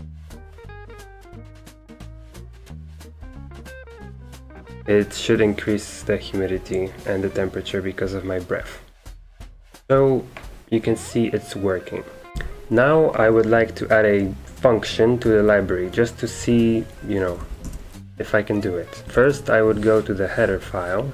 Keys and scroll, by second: 12.3 ctrl+c, 15.2-21.1 typing, 17.1 Escape, 18.2 super+3.